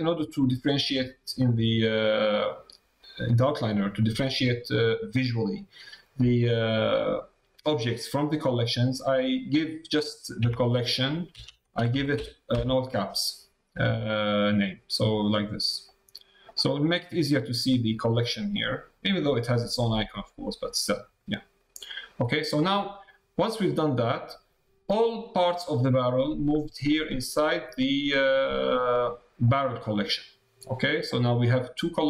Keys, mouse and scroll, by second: 18.5 click, 20.3 click, 29.4 click.